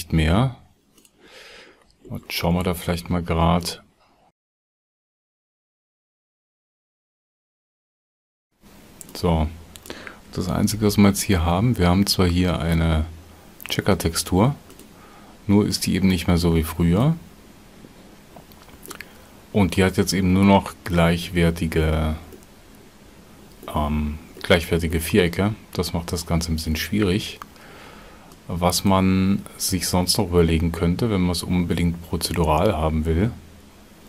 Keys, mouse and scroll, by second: 6.2 shift+a, 10.5 shift+a.